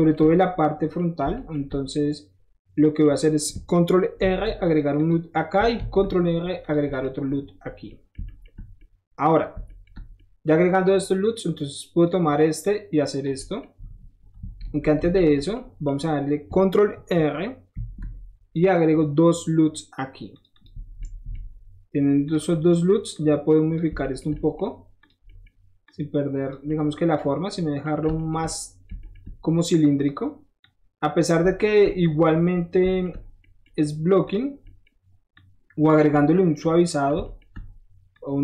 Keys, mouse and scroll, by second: 0.9 shift+middle click, 1.3-3.0 shift+middle drag, 4.1 ctrl+r, 4.6 click, 4.9 click, 5.7 ctrl+r, 6.6 click, 6.9 click, 7.8 middle click, 8.2 shift+middle click, 8.5 scroll down 1, 8.7 shift+middle click, 9.8 shift+middle click, 10.7 shift+click, 11.5-12.0 shift+drag, 12.6 click, 13.3 middle click, 14.6 ctrl+z, 14.9 ctrl+z, 15.3 scroll down 1, 15.5 middle click, 17.7 ctrl+r, 20.3 click, 20.5 click, 20.8 middle click, 21.0 middle click, 21.5 middle click, 21.6 middle click, 22.2 click, 22.5 middle click, 23.1 click, 24.0 shift+middle click, 24.3 shift+middle click, 25.0 shift+click, 25.2 shift+middle click, 25.8 shift+click, 27.1 middle click, 29.9 shift+click, 30.6 shift+click, 31.4-31.8 scroll up 2, 32.0-34.2 shift+middle drag, 34.2 shift+click, 34.3-35.3 shift+middle drag, 35.3 shift+click, 36.1 middle click, 38.1 shift+click.